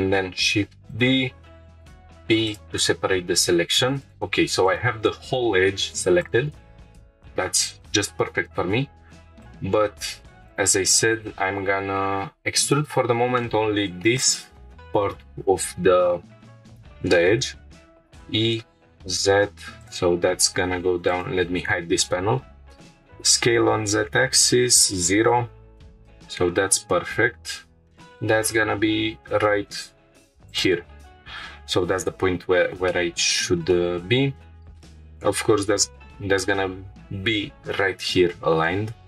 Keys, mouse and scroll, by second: 0.4 shift+d, 0.9 right click, 1.7 p, 3.0 scroll down 2, 3.5 Tab, 4.0 click, 6.9 shift+middle click, 6.9 scroll down 1, 8.3 Tab, 9.4 click, 10.5 click, 12.6 ctrl+click, 13.4-14.1 shift+middle drag, 18.7 z, 19.8 click, 21.1-22.8 drag, 22.9 s, 23.2 z, 24.3 shift+0, 25.2 Return, 25.9 g, 26.1 z, 30.5 shift+click, 32.4 scroll up 2, 32.9-33.4 shift+middle drag, 33.7-34.8 middle drag.